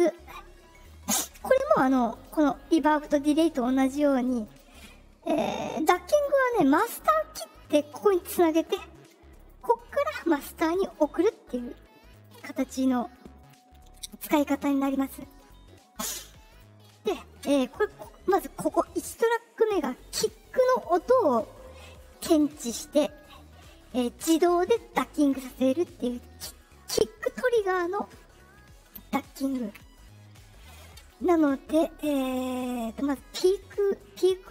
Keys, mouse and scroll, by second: 2.1 click, 3.0 click, 4.4 click, 6.8 click, 7.6 click, 9.3 click, 10.8 click, 12.1 click, 13.3 click, 14.7 click, 15.3 click, 16.4 click, 28.0 middle click, 28.0 scroll down 2, 31.2 click, 34.1 click.